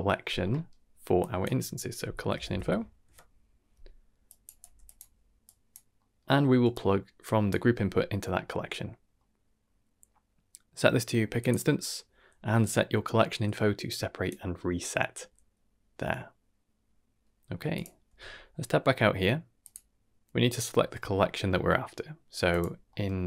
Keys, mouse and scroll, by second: 0.2 scroll up 2, 0.5 middle click, 1.1-4.2 drag, 2.4 l, 5.4 click, 5.9 middle click, 6.6-7.4 drag, 9.1-9.6 middle drag, 11.3 click, 13.8 click, 17.7 click, 18.0 Tab, 18.5-18.8 scroll down 2, 18.8 middle drag, 19.5-22.4 drag, 22.8 middle click.